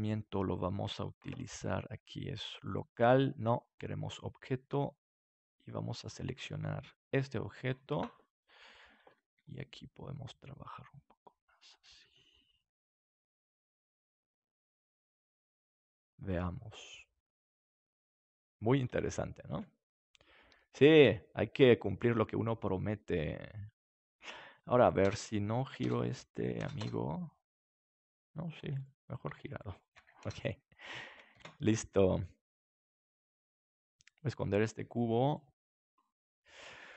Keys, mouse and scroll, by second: 2.6-5.2 drag, 5.9-8.6 drag, 9.3 right click, 9.3 s, 16.0-17.4 middle drag, 17.4 click, 17.4 middle click, 19.4 ctrl+s, 20.9 KP_7, 22.0-24.1 drag, 24.8-31.4 drag, 31.3 ctrl+s, 34.2 right click, 35.2-36.9 drag, 35.2 right click, 36.3-36.9 middle drag.